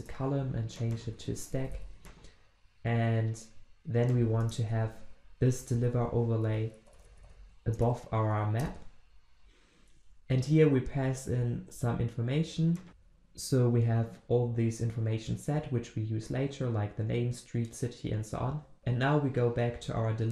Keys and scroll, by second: 4.8 ctrl+v, 9.4 ctrl+z, 11.3 ctrl+z, 11.5 ctrl+v, 12.9 alt+Return, 18.8 ctrl+alt+Left.